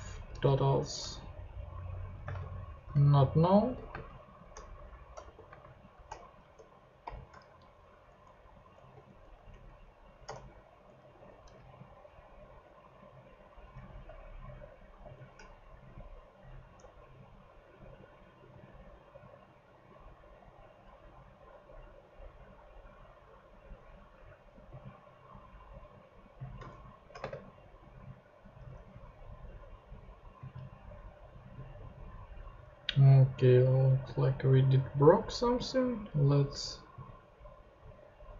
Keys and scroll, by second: 0.1 alt+Left, 0.5 alt+shift+i, 1.7 alt+shift+i, 2.1 alt+Right, 2.2 alt+space, 3.2 shift+space, 3.6 shift+7, 3.9 shift+space, 4.7 shift+Escape, 5.2-7.0 typing, 7.5 shift+Return, 8.0 Down, 8.9 shift+Down, 9.5 alt+shift+Up, 10.3 alt+shift+Tab, 10.8 Down, 11.1 super+x, 15.0 shift+super+p, 17.6 super+Tab, 26.9 alt+shift+Left, 27.2 alt+shift+space, 28.0 Escape, 28.5 super+Escape, 28.6 super+Tab, 32.8 super+Tab.